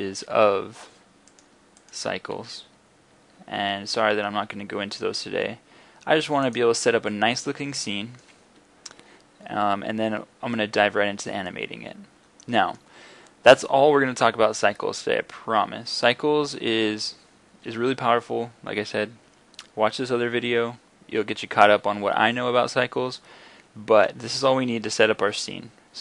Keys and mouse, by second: 0.0 Escape, 3.9 r, 6.6-7.1 drag, 7.2 click, 7.9-11.0 middle drag, 11.7 middle click, 22.6 middle click, 23.0 middle click.